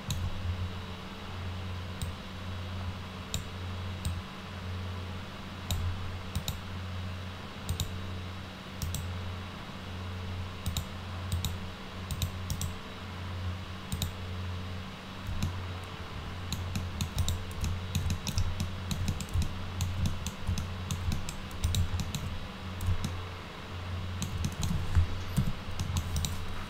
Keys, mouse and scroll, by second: 2.0-3.4 drag, 4.1-5.7 drag, 6.4 click, 7.7 click, 10.7 click, 11.3 click, 12.1 click, 12.5 right click, 14.0 click, 15.4-16.5 alt+middle drag, 16.8 alt+middle click, 17.2 click, 17.7 alt+middle click, 18.1 middle click, 18.6 alt+middle click, 19.1 middle click, 19.4 alt+middle click, 20.1 middle click, 20.6 alt+middle click, 21.1 middle click, 21.6 click, 22.0 alt+middle click, 23.1-24.2 alt+middle drag, 24.5 middle click, 25.4 F4, 25.8 middle click, 26.2 click.